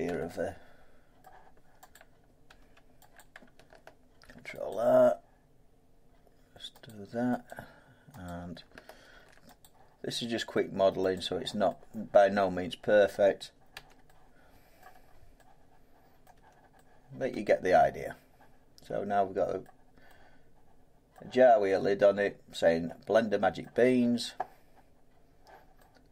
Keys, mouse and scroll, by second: 0.0 Tab, 0.5 scroll up 4, 1.1 middle click, 1.9 click, 2.6 Tab, 3.1 click, 4.2 ctrl+r, 4.7 click, 6.8 click, 8.2 click, 9.1 ctrl+r, 9.6 click, 11.1 click, 13.0 middle click, 13.7 Tab, 14.7 middle click, 14.9 middle click, 16.2 middle click, 16.3 Tab, 17.3 middle click, 17.3 Tab, 19.6 middle click, 21.1 middle click, 23.5 middle click.